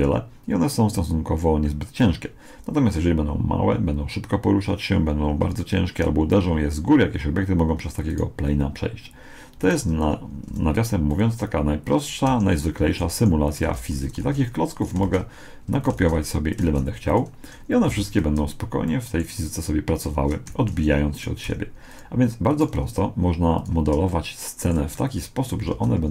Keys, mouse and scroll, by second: 1.4 right click, 8.1-11.6 right drag, 10.5 g, 12.3 Escape, 13.0-16.7 typing, 14.3-15.9 drag, 16.1-18.5 drag, 17.9 alt+a, 18.9-20.9 middle drag, 20.5 Escape, 21.2-24.3 right drag, 21.5 g, 22.7 g, 24.1-26.1 middle drag, 25.7 alt+a.